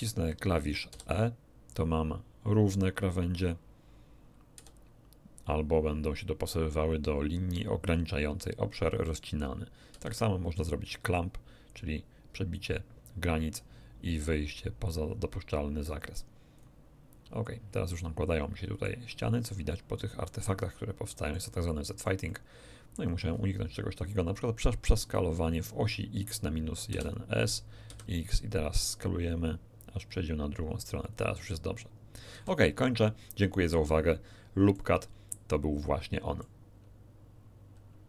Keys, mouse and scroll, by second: 0.8 e, 4.5 e, 9.9 c, 16.5 click, 17.9-19.0 middle drag, 19.0-19.6 scroll up 1, 19.7-21.5 middle drag, 21.6-23.1 middle drag, 23.3 scroll down 1, 26.8 s, 31.0 click, 32.3 a, 33.4-33.8 scroll down 3, 33.8 shift+click, 34.0 shift+middle click, 35.2-36.6 shift+drag.